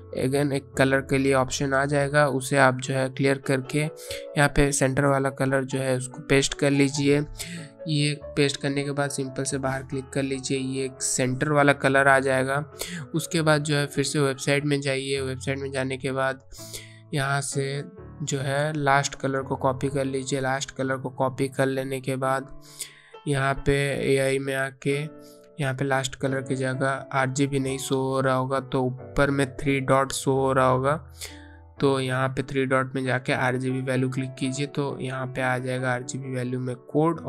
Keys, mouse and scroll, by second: 1.9 click, 2.8 BackSpace, 6.6 click, 7.7 BackSpace, 8.6 click, 11.4 click, 16.8 click, 19.1 right click, 19.6 click, 32.4 click, 36.0 BackSpace.